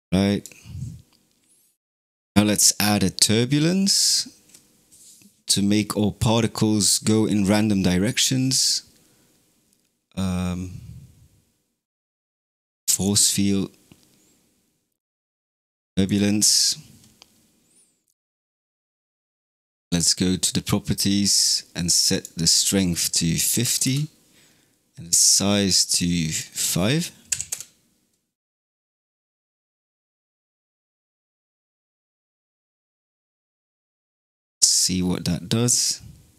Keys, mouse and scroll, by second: 2.1 shift+a, 19.7 click, 21.1-22.0 scroll down 3, 22.0-26.0 drag, 26.3-29.2 drag, 29.5-30.9 scroll down 4, 32.2 space, 33.5 scroll up 4, 34.7 middle click, 35.1 middle click, 35.5 middle click.